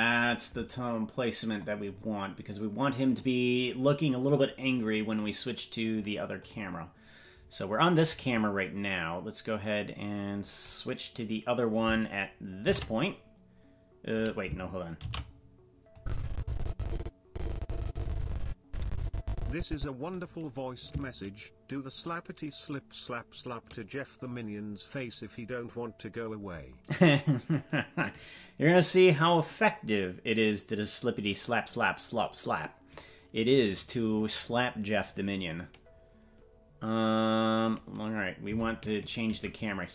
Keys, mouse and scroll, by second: 1.5-3.0 scroll up 6, 3.0 click, 3.0 scroll up 2, 6.3 click, 12.6 ctrl+b, 15.3 ctrl+z, 15.9-20.2 drag, 38.4 ctrl+b.